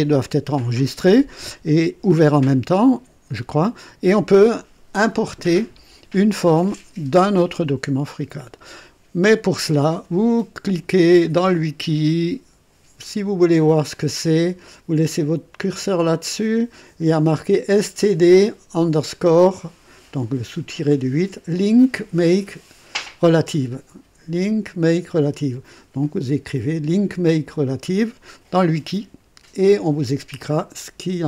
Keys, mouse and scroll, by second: 22.2 click.